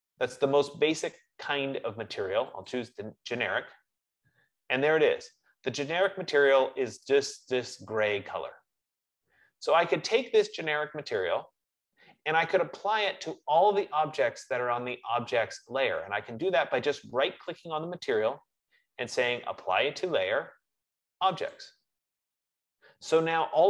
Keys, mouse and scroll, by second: 2.9-8.0 drag, 17.9 right click, 21.8 click.